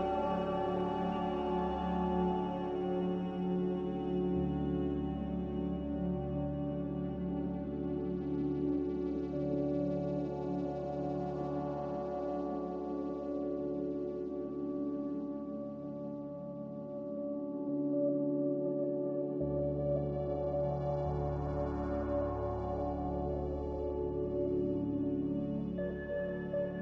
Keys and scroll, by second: 10.3 Delete, 11.7 Delete, 12.6 Delete, 14.4 Delete, 17.9-18.7 typing, 20.4-21.1 typing, 23.3 ctrl+z.